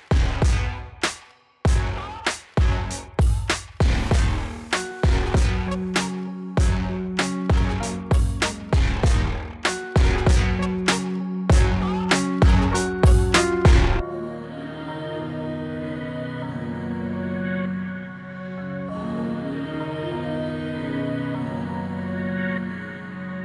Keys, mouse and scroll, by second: 4.6 click, 5.7 click, 7.0-8.5 typing, 10.4-12.0 drag, 13.5-15.4 scroll down 1, 15.4 click, 18.6 click, 22.1 click, 22.1-23.0 shift+drag.